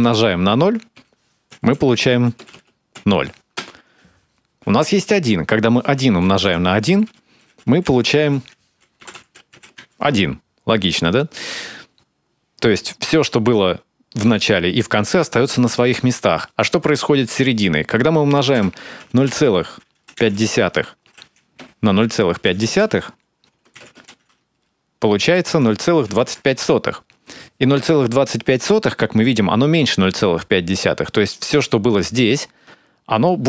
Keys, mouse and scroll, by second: 1.3-2.7 typing, 3.4 Return, 5.9 1, 6.5 1, 7.5 space, 7.6 -, 7.8 space, 8.8-9.6 typing, 18.3 Return, 18.8 0, 19.1 ., 20.0 5, 21.8-23.6 typing, 25.2 0, 25.5 ., 25.9 2, 26.0 5.